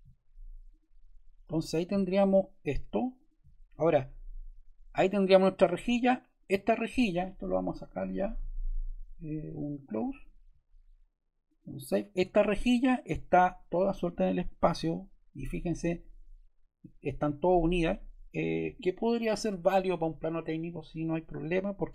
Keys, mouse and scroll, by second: 3.0 click, 3.6 click, 7.8 click, 14.5 super+z, 18.7 super+z.